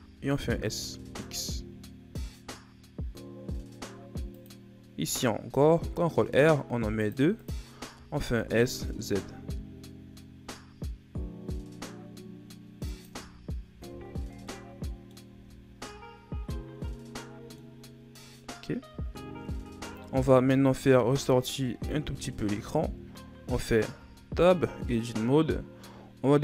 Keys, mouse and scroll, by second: 5.5 ctrl+r, 8.0 s, 13.2 Tab, 13.9 Tab, 14.3 scroll down 2, 14.5 middle click, 15.3 a, 15.6 scroll down 2, 15.9-18.3 middle drag, 18.3-18.9 scroll up 2, 18.9 Tab, 20.0 middle click, 21.0 Tab, 21.5 middle click, 22.2 shift+scroll down 3, 22.7-23.1 scroll up 1, 24.0 Tab.